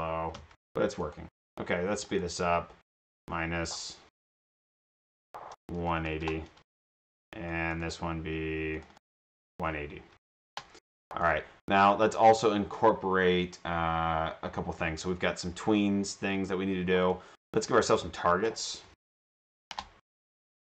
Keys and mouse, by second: 1.2-1.6 drag, 2.0 click, 4.5 BackSpace, 4.7 BackSpace, 4.7 \, 7.6 click, 7.9 click, 8.8 click, 11.2 click, 16.4 click, 17.1 click, 17.4 click, 17.6 click, 18.6-19.9 typing, 20.5-20.6 drag.